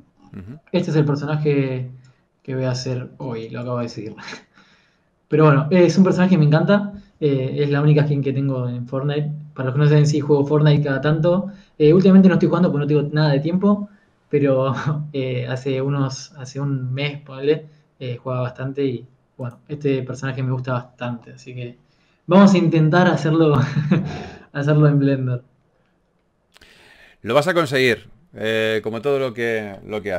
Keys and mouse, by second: 6.5-10.3 middle drag.